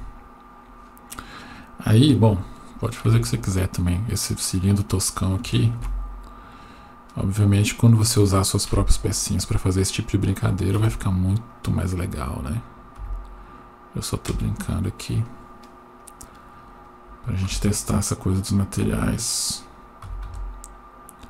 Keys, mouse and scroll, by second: 3.1 Tab, 4.4-5.2 scroll up 1, 5.8 ctrl+r, 8.7 KP_1, 9.6-10.6 scroll up 2, 10.8 1, 11.5 click, 13.0 s, 15.3 click, 16.0 click, 17.4 s, 20.0 s.